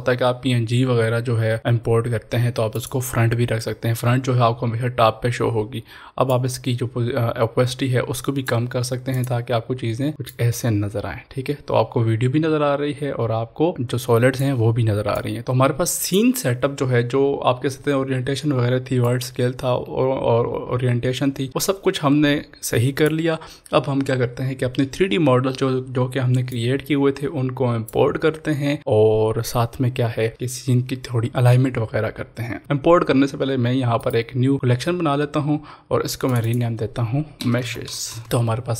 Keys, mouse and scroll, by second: 2.8 click, 6.3 click, 6.4-15.1 drag, 15.4 ctrl+s, 16.1 click, 19.0-26.5 drag, 26.5 click, 26.6-29.9 drag, 32.6 click, 34.0 right click, 34.5 click, 37.6 shift+m, 37.6 e, 38.2 Return.